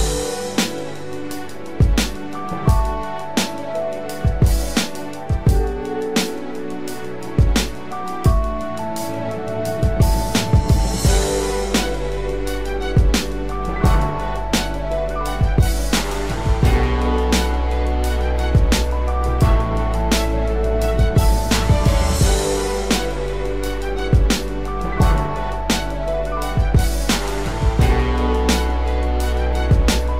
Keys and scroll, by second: 24.3 ctrl+z, 27.3 ctrl+z.